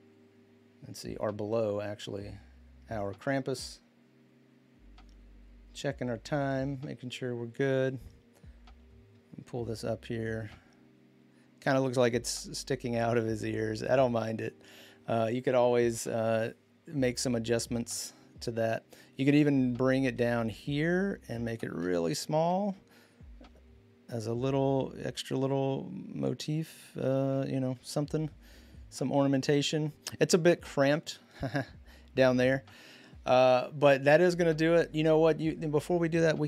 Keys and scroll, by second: 22.2 ctrl+t, 27.5 Return.